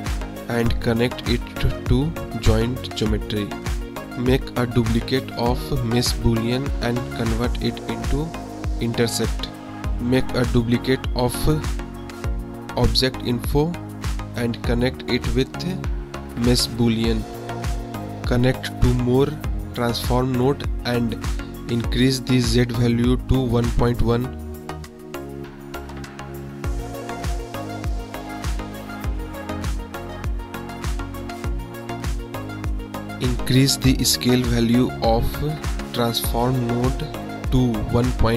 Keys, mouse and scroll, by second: 0.9-2.9 drag, 4.6 click, 5.6 shift+d, 6.1 click, 6.8 click, 7.8 click, 9.2 click, 9.9 click, 10.6 shift+d, 12.1-13.0 drag, 14.5 middle click, 15.3 drag, 15.9 click, 18.1 click, 18.8 shift+d, 19.8 click, 20.7 shift+d, 22.1 click, 23.7 click, 24.6 click, 25.3 click, 25.9 click, 26.4 middle drag, 26.8-27.5 middle drag, 27.8 KP_1, 30.5 click, 30.9 KP_Decimal, 31.3-31.7 drag, 32.1 click, 32.7 middle click, 33.5 middle click, 36.0-38.3 drag.